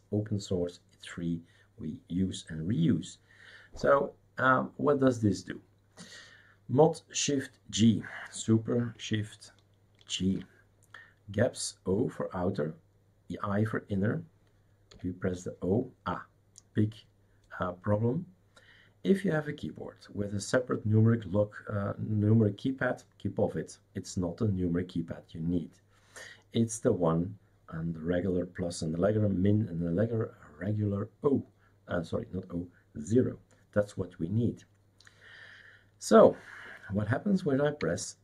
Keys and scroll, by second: 10.2 shift+super+g, 14.9 o.